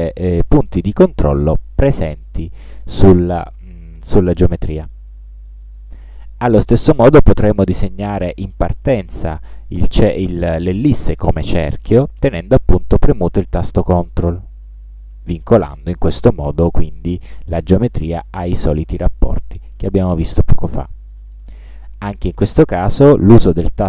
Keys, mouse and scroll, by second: 5.1 middle click, 13.2-21.5 ctrl+drag, 22.3-23.3 ctrl+drag.